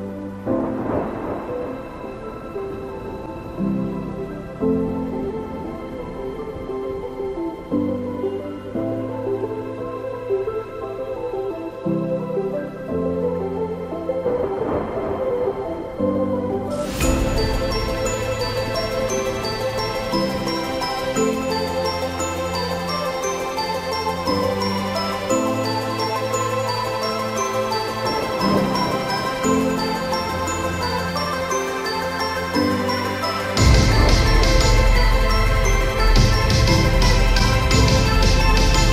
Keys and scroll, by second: 4.0 Return, 22.5 ctrl+alt+z.